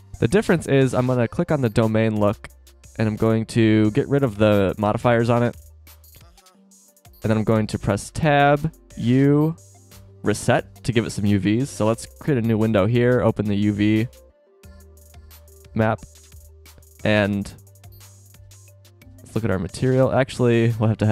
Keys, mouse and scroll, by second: 0.0 Escape, 5.6 z, 7.5 Tab, 8.9 u, 11.6 click, 15.2-17.2 drag, 17.8-18.7 drag, 19.3 click, 20.8 drag.